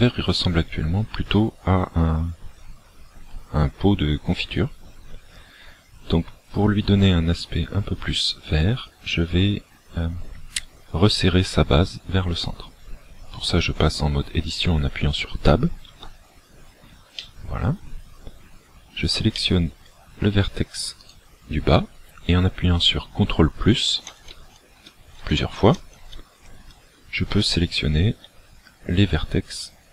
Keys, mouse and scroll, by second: 0.1 middle click, 16.0 Tab, 17.3 middle click, 19.4 middle click, 21.1 right click, 24.1 ctrl+KP_Add, 24.4 ctrl+KP_Add, 24.9 ctrl+KP_Add, 25.3 ctrl+KP_Add, 25.7 ctrl+KP_Add, 26.0 ctrl+KP_Add, 26.6 ctrl+KP_Add, 27.3 ctrl+KP_Add.